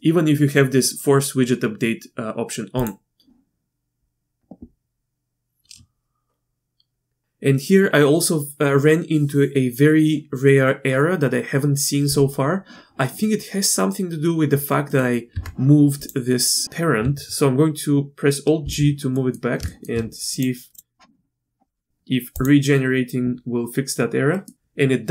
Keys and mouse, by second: 2.8-4.5 drag, 14.9 click, 15.3 Tab, 18.6 alt+g, 19.1 click, 19.6 shift+middle drag, 20.4 click, 20.7 click, 22.3-22.8 drag, 24.3 click.